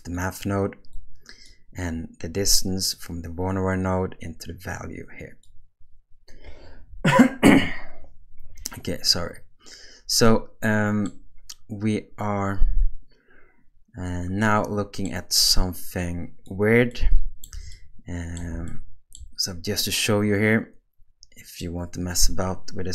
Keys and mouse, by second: 0.1-0.7 drag, 0.9 click, 2.9-5.5 drag, 10.3 middle click, 14.4-15.0 middle drag, 16.0 click, 16.9-17.4 middle drag, 17.7-18.4 ctrl+middle drag, 18.7-19.1 shift+middle drag, 20.0-21.7 middle drag.